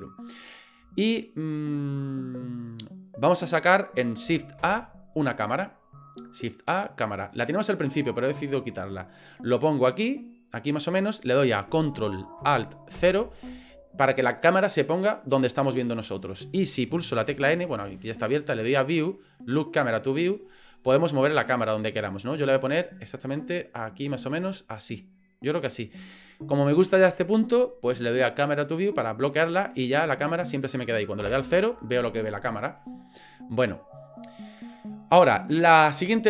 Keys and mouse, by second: 1.7 middle click, 4.6 shift+a, 9.9-11.7 middle drag, 13.0 ctrl+alt+KP_0, 17.2 n, 17.5 n, 19.8 click, 21.0-22.1 shift+middle drag, 22.4 ctrl+middle click, 23.4 middle click, 24.2-25.8 shift+middle drag, 28.7 click, 29.8-30.8 middle drag, 31.2 KP_0.